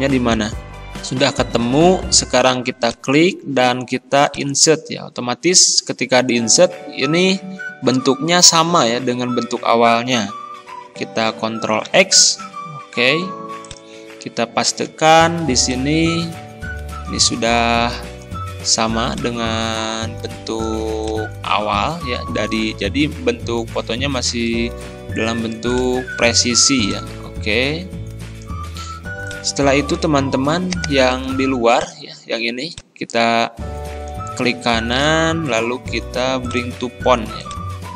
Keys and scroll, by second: 11.8 ctrl+x, 14.9 ctrl+v.